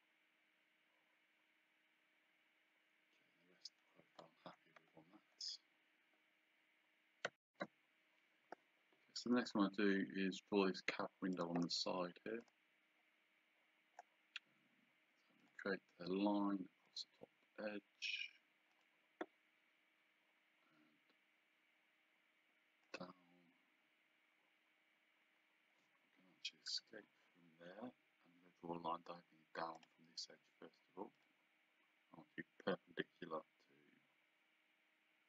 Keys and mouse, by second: 11.3 click, 15.4 click, 16.9 click, 18.7 click, 22.8 click, 26.7 Escape, 29.8 click, 31.2 click.